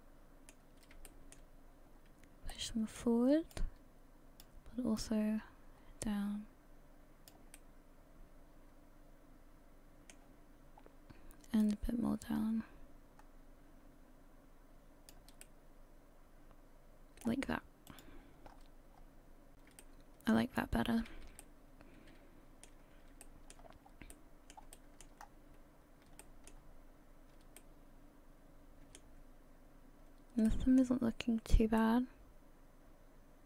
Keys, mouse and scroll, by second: 17.9 middle click, 17.9 click, 17.9-18.4 scroll up 1, 18.5 scroll up 5, 18.9 scroll down 3, 19.8 shift+middle click, 20.9 a, 21.1 a, 21.4 middle click, 23.2 shift+middle click, 23.8 scroll down 4, 24.1 middle click, 24.7 shift+middle click, 25.2-26.1 scroll up 5, 26.2 shift+middle click, 27.0 scroll up 1, 27.6 shift+middle click, 30.5 middle click, 30.5 scroll down 1, 31.3-31.6 scroll up 1, 31.8 shift+middle click.